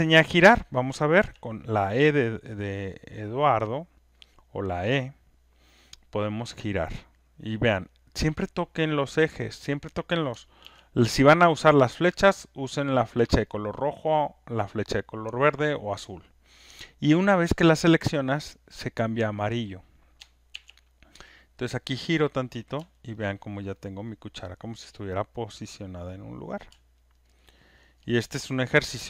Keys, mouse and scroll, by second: 8.8-9.8 drag, 10.7 ctrl+z, 19.6 click, 20.6 ctrl+z, 22.3 click, 23.2 alt+right click, 23.6 alt+click, 24.0 alt+middle click, 24.6 alt+click, 26.4 click, 27.2 alt+right click, 28.2 alt+scroll, 28.4 alt+middle click, 28.7 alt+scroll, 28.8 alt+middle click.